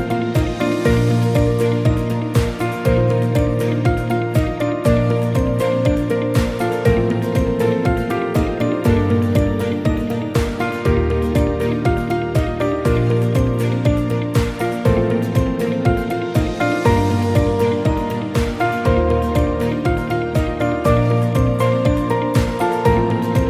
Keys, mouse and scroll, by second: 0.1 right click, 2.2 click, 2.3 right click, 4.2 right click, 11.5-14.3 right drag, 14.7-17.6 right drag, 18.8-20.3 right drag.